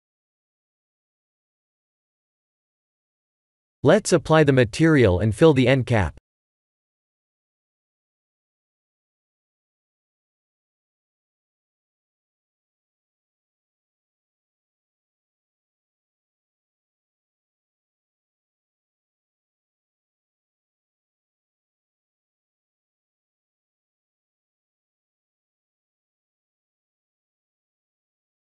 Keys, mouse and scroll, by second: 1.2 click, 2.2 click, 4.1 click, 7.0 click, 7.3 middle click, 12.1-13.0 scroll up 6, 12.7 Tab, 13.1 shift+middle click, 13.7-14.3 scroll up 1, 14.3 Tab, 14.3 scroll up 1, 15.0 Tab, 15.4 Tab, 15.7 right click, 16.7 click, 17.0 right click, 17.0 click, 19.5 ctrl+s, 19.8 Tab, 20.4 3, 20.6 2, 21.4 alt+click, 21.9 f, 22.2 Tab, 23.0 click, 24.1 middle click, 26.9 KP_1, 28.1 KP_7, 28.2 shift+a.